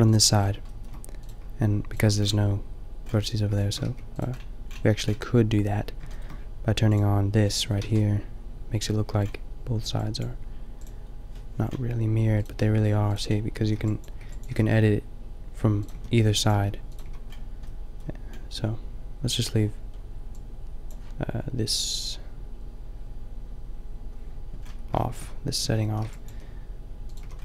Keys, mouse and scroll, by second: 3.8 g, 7.8 a, 8.5 shift+middle click, 10.8 a, 11.7 middle click, 12.8-14.5 typing, 15.9 a, 16.1 b, 16.5 g, 17.0 a, 24.7 middle click, 25.6-27.1 typing.